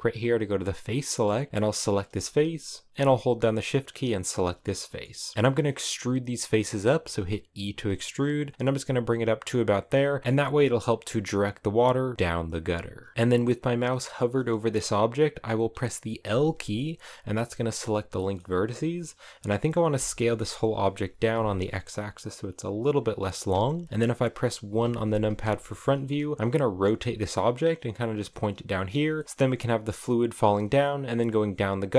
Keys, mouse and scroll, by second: 0.1 click, 0.6 middle click, 1.5 right click, 3.8 shift+right click, 4.1 shift+scroll down 1, 4.2-5.3 middle drag, 5.3 e, 9.7 scroll down 2, 9.9-12.4 middle drag, 12.4-12.8 scroll down 1, 13.0-15.9 shift+middle drag, 15.9 l, 16.1 scroll down 2, 16.4-19.5 middle drag, 19.5 s, 24.3 KP_1, 25.1-25.6 scroll up 1, 25.6 shift+middle click, 26.2 r, 26.7 g, 27.8 r, 28.2 g, 28.8-31.9 shift+middle drag.